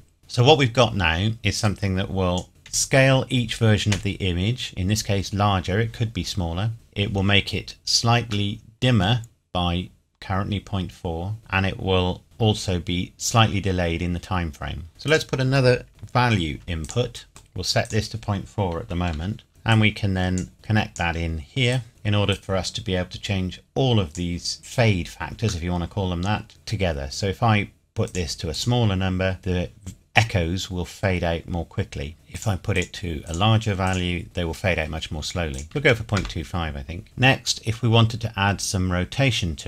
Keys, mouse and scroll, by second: 0.2 scroll up 1, 1.6 click, 2.7 Right, 6.7 ▶, 7.6-8.5 scroll up 1, 8.5 middle click, 9.4-11.3 scroll up 1, 15.0 click, 15.9 shift+d, 16.8 click, 17.3 middle click, 17.8 click, 18.8 KP_Decimal, 19.2 KP_4, 19.5 KP_Enter, 19.7 click, 25.7 middle click, 28.1 click, 32.1 middle click, 32.4 click, 35.5 click, 35.6 KP_Decimal, 35.7 KP_2, 35.9 KP_5, 36.2 KP_Enter, 37.0 click, 37.8-39.6 scroll down 1.